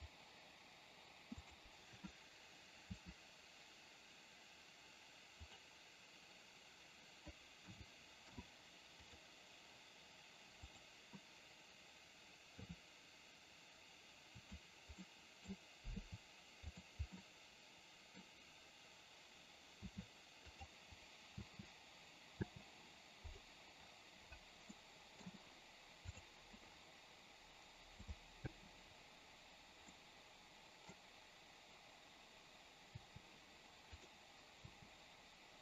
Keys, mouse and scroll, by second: 0.0 click, 1.5 click, 10.9 click, 17.3-18.3 middle drag, 24.9 middle click, 26.3 click, 28.0 click, 30.0-31.0 middle drag, 34.0 click.